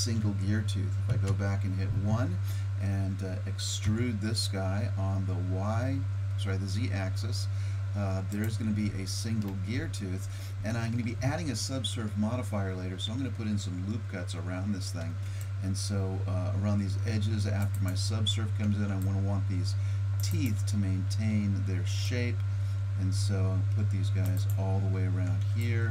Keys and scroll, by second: 1.1 KP_1, 3.9 e, 15.0 ctrl+r, 18.6 ctrl+r, 21.8 ctrl+r, 25.3 ctrl+r.